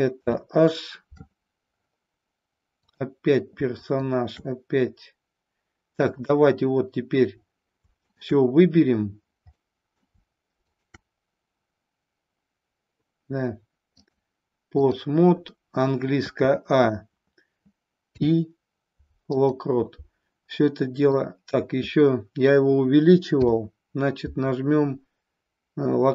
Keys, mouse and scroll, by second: 0.1 h, 2.7 click, 3.7 shift+click, 6.0 click, 8.0 shift+click, 9.6 middle click, 14.0-15.0 drag, 16.2 a, 18.0 i, 20.6 middle click, 23.2 i.